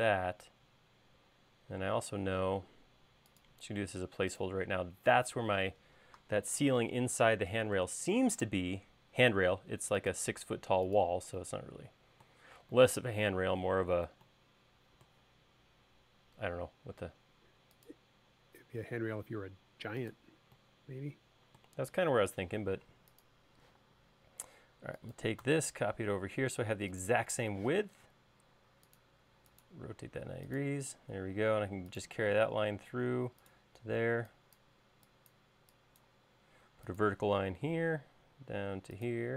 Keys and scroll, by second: 1.7 l, 2.8 r, 8.8 r, 23.0 space, 24.0 m, 28.0 q, 31.3 l, 34.1 e, 36.6 l.